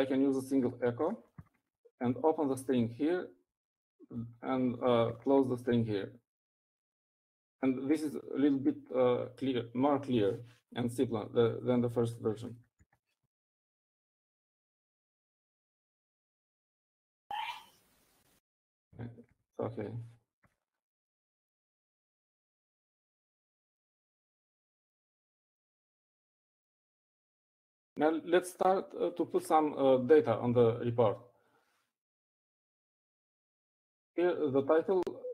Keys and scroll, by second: 0.0-2.8 typing, 3.8 Down, 4.3 Down, 4.8 Down, 5.3 Down, 5.5 Right, 6.3 shift+', 13.7-14.2 typing, 15.6-20.8 typing.